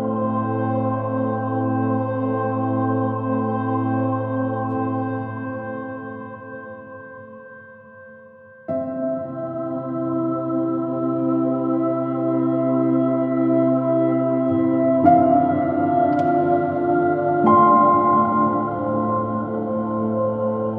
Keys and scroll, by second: 0.3 super+z, 2.7 x, 4.3 super+-, 15.0 super+s, 18.3 super+i.